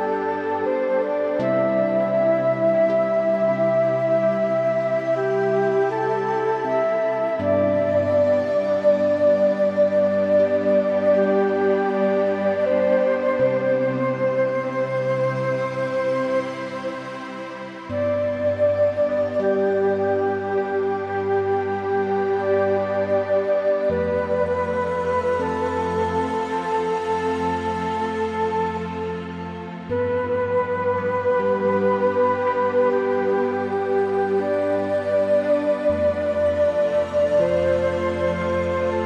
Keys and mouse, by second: 0.6 click, 1.0 Tab, 1.1 click, 1.4 middle click, 3.0 middle click, 3.6 shift+middle click, 4.1 middle click, 5.0 middle click, 6.4 shift+middle click, 6.6 middle click, 6.9 shift+middle click, 9.2 middle click, 9.7 middle click, 10.4 Tab, 10.8 middle click, 11.3 click, 11.9 s, 12.4 o, 13.2 BackSpace, 14.3 Escape, 14.6 click, 15.6 click, 16.0 s, 16.9 Escape, 17.2-20.7 typing, 18.4 Escape, 20.2 click, 21.6 Escape, 21.9 o, 22.2 BackSpace, 24.0 BackSpace, 25.2 middle click, 25.4 s, 31.2 Tab, 31.3 click, 31.6 middle click, 32.4 middle click, 32.9 middle click, 33.2 shift+middle click, 33.4 middle click, 33.7 middle click, 34.2 shift+middle click, 37.4 click, 37.8 shift+a.